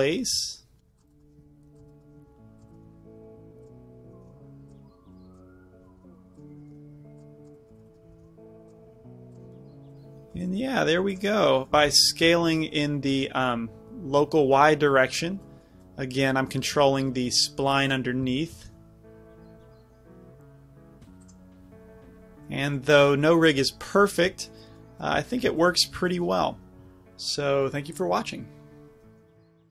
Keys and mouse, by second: 0.0-3.0 typing, 0.1 click, 3.7-4.7 right drag, 4.1 s, 5.8 s, 6.4 right click, 6.6 s, 7.8 drag, 8.0-8.7 middle drag, 8.1 s, 8.7-9.5 right drag, 9.0 g, 11.8 s, 15.3-20.1 drag, 16.9 r, 18.4 s, 21.4 click, 21.9-29.0 middle drag.